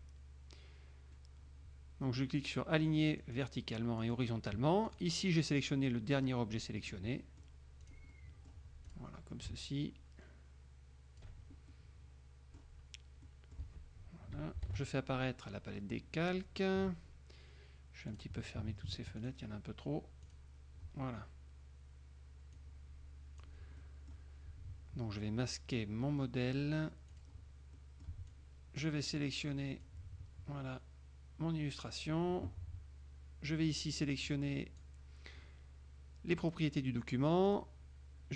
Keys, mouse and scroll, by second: 3.4 click, 4.1 click, 5.0 click, 7.0 middle click, 8.0 click, 8.2 middle click, 9.0 click, 9.6-11.5 ctrl+drag, 11.8-12.9 ctrl+scroll up 1, 13.4-13.8 scroll up 1, 14.7 ctrl+shift+l, 18.3 click, 19.4 click, 20.4 click, 22.7-23.8 drag, 24.0 click, 27.2 click, 27.9 middle click, 30.0-32.4 drag, 34.4 click, 37.6 click.